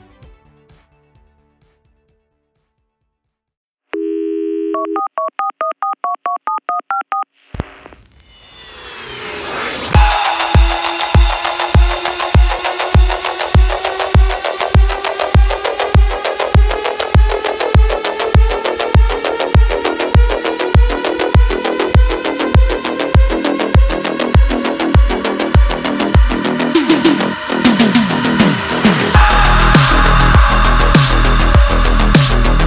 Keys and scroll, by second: 10.4 ctrl+z, 23.3 f, 23.9 x, 24.2 r, 27.9 w, 31.5 w, 31.9 Insert.